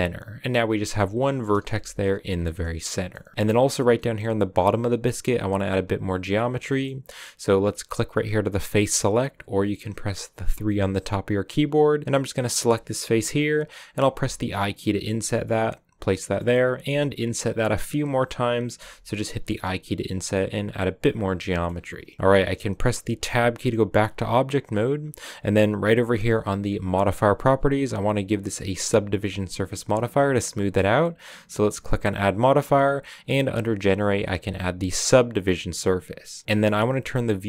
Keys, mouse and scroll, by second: 0.7 middle click, 1.0 1, 1.2 right click, 1.5 g, 2.2 scroll down 3, 2.4-3.8 middle drag, 3.8 scroll down 2, 3.9-6.5 middle drag, 6.5 scroll up 1, 6.7-8.7 middle drag, 8.7-10.5 drag, 10.5 3, 12.0-13.7 right drag, 13.9 i, 16.1 middle click, 16.6 i, 18.7 i, 20.0 scroll down 4, 20.2-21.6 middle drag, 21.6-22.1 scroll up 4, 22.4-23.0 scroll down 2, 23.1 Tab, 24.2-25.0 scroll up 1, 26.8 click, 31.4-34.6 drag, 36.2-37.4 drag.